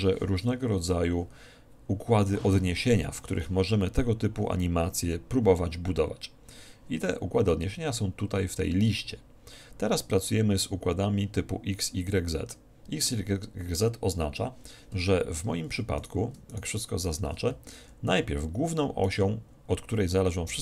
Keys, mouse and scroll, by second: 16.1-18.8 right drag, 18.3 alt+r, 19.2-20.6 right drag.